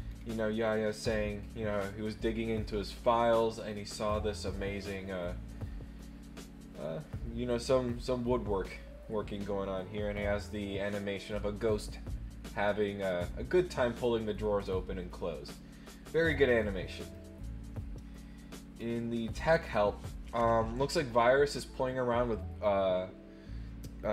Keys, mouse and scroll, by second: 0.1 scroll down 1, 0.6 click, 3.7 middle click, 14.6 click, 17.0 click, 19.3 scroll up 6.